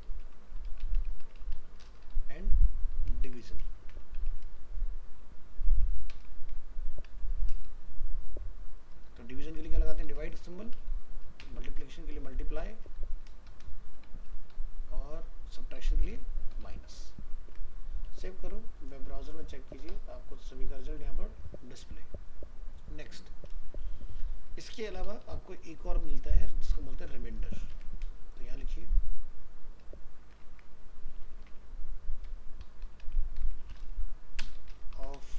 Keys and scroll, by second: 3.2 ctrl+shift+Left, 17.4 ctrl+s, 27.1 ctrl+c, 27.6 ctrl+Return, 27.7 ctrl+v, 30.4 ctrl+shift+Right.